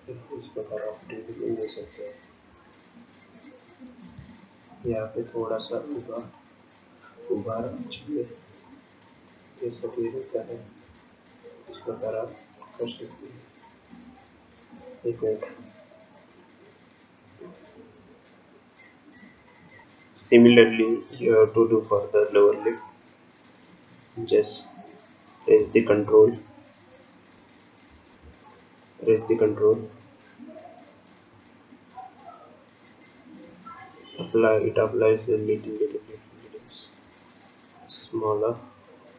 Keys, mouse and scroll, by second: 0.6 ctrl+click, 2.0-2.5 scroll down 4, 2.5-3.8 scroll up 4, 3.8-4.2 scroll down 2, 4.9 ctrl+click, 5.7 ctrl+click, 7.9 ctrl+click, 16.3 click, 21.0-23.5 scroll up 2, 23.6 scroll down 1, 24.1-25.6 scroll up 2, 26.0 click, 28.9 ctrl+click.